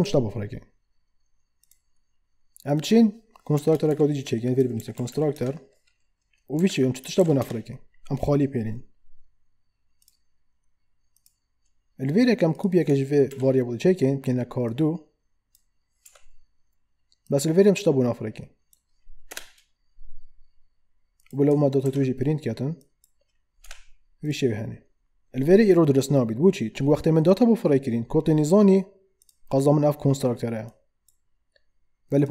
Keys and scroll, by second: 3.6 Return, 3.9 Up, 5.3 Return, 6.5 Right, 7.2 shift+[, 7.4 Return, 13.3 ctrl+d, 16.0 2, 19.3 BackSpace, 21.8 ctrl+d, 23.6 2.